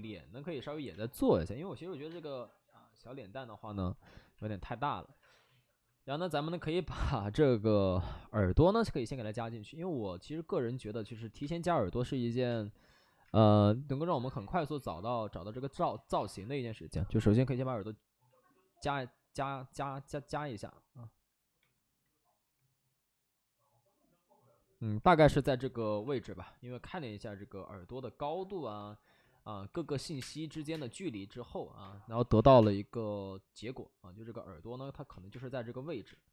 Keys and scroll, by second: 0.8 space, 2.0 space, 10.8 alt+s, 11.3 space, 12.4 space, 13.2 space, 15.9 alt+s, 17.0 w, 21.5 3, 22.3 w, 24.9 3, 25.7 alt+s, 29.6 3, 30.0 3, 30.1 space, 30.6 space, 31.8 space, 32.1 ctrl+z, 32.4 3, 32.5 space, 35.2 space, 36.0 space.